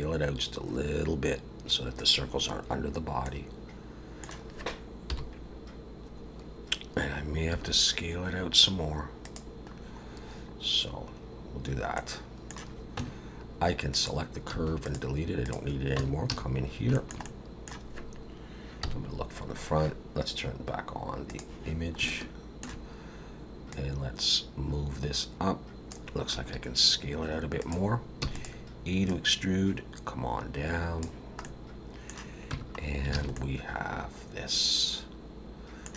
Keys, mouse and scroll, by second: 3.2 middle click, 5.1 KP_7, 7.5 s, 9.7-10.6 scroll down 5, 11.3-12.0 scroll up 3, 12.0 middle click, 13.0 Tab, 13.9 click, 14.5 x, 15.4 click, 16.0 Tab, 16.3 a, 16.6-16.9 scroll up 3, 16.9 shift+middle click, 17.2 middle click, 18.8 KP_1, 21.3 click, 22.1 shift+middle click, 23.7 click, 26.3 s, 28.3 e, 29.1 click, 31.4 middle click, 32.5 Tab, 32.8 scroll down 2, 33.1 alt+a, 33.3 middle click.